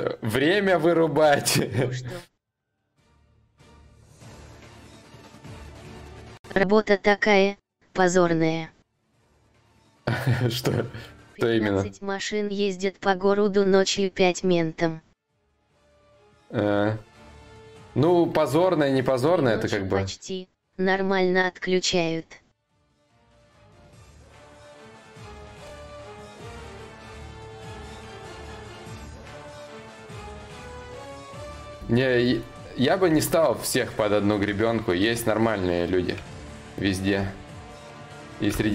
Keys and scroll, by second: 21.5 4.